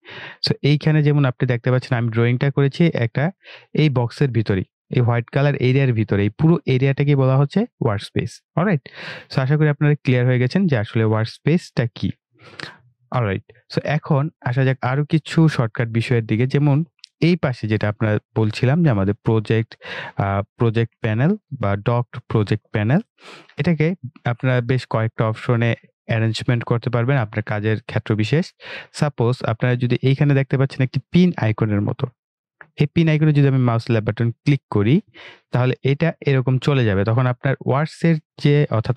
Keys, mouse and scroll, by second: 33.3 click, 37.1-38.9 scroll down 1.